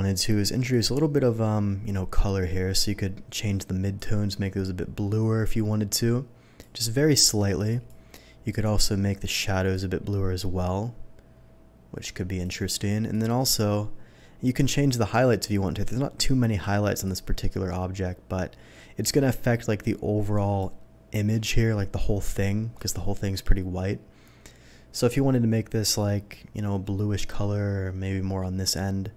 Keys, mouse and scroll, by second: 0.7 click, 3.9 click, 7.7 click, 8.5 click, 9.7 click, 13.1 click, 14.5 click, 17.0 click, 22.7-29.1 drag.